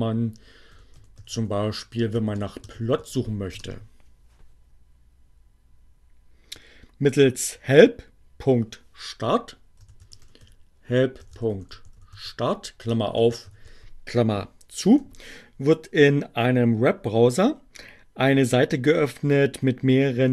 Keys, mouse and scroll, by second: 0.0-2.5 typing, 3.0 Return, 9.4-13.7 typing, 14.7 Return.